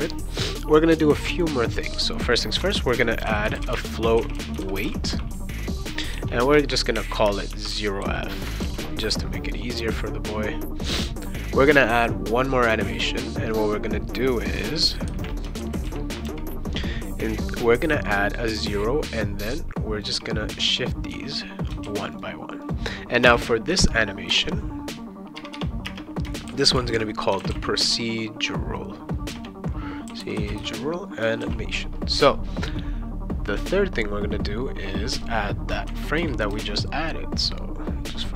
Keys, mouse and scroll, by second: 1.7 click, 2.6 Return, 2.9-8.5 typing, 8.6 ctrl+s, 9.9 click, 12.3 click, 15.6 ctrl+c, 15.9 ctrl+v, 16.2 ctrl+v, 19.4 click, 20.0 1, 20.6 click, 21.1 2, 21.8 ctrl+s, 22.1 click, 22.6 click, 23.2 space, 23.6 \, 24.3 BackSpace, 26.2-31.1 typing, 31.4 ctrl+s, 32.1 click, 34.9 click, 35.9 ctrl+c, 36.1 ctrl+v, 36.5 ctrl+v, 37.5 click.